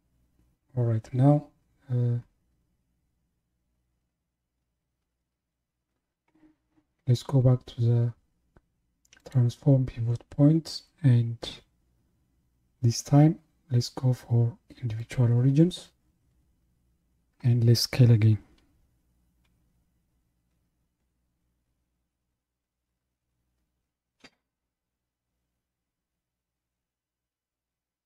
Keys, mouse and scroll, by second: 9.2 click, 19.5 s.